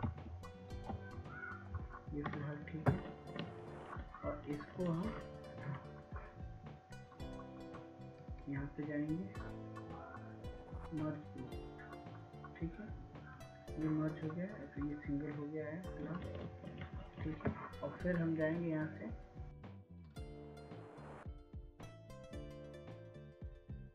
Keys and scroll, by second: 2.3 Down, 4.6 Down, 5.4 Down, 6.2 Down, 23.5 ctrl+s.